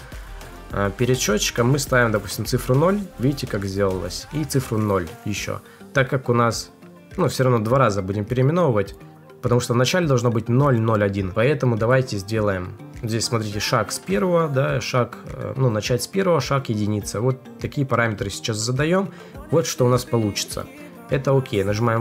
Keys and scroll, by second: 0.1 Left.